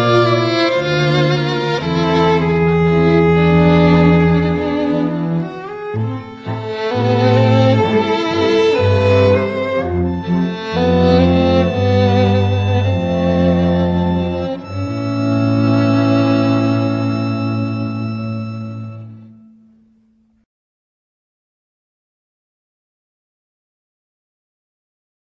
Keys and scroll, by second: 3.7 e.